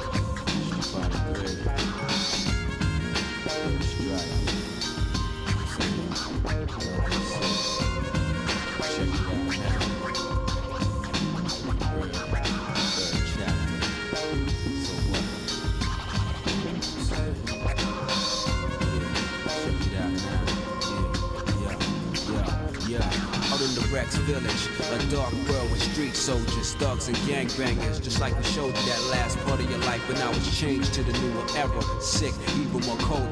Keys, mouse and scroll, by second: 1.0 click, 2.3 x, 3.7 middle click, 4.9 click, 6.2 x, 10.4 shift+middle click, 11.4 shift+middle click, 12.0 middle click, 13.6 shift+middle click, 14.2-14.7 scroll down 2, 14.7 shift+middle click, 15.3-15.7 scroll down 1, 15.7 middle click, 16.3-17.4 shift+middle drag, 18.4 ctrl+Tab, 19.6 click, 20.4 shift+click, 21.4 KP_7, 22.0 z, 23.9 middle click, 24.7 middle click, 25.4 middle click, 26.4 scroll up 1, 26.4 scroll down 1, 26.6-27.1 scroll up 4, 27.3 middle click, 28.8 g, 32.2-32.8 scroll down 3, 32.5 middle click, 33.1 middle click.